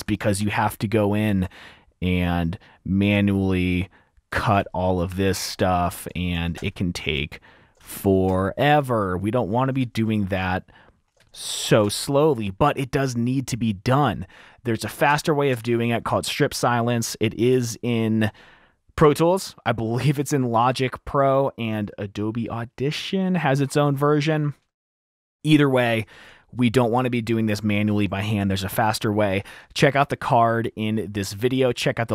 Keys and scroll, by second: 0.0 super+2, 2.7 F7, 5.2 F7, 5.2 F2, 5.2 t, 6.6 F7, 7.3 F7, 7.5 F2, 8.5 F2, 10.5 super+`, 12.0 super+`, 13.3 super+`, 15.7 super+`, 17.2 super+`, 19.2 F2, 19.3 typing.